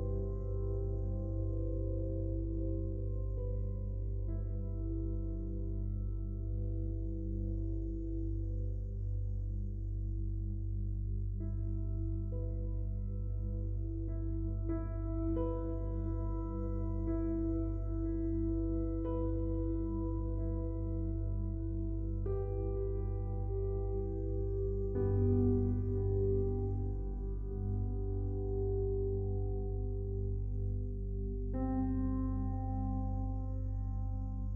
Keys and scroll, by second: 3.0 ctrl+z.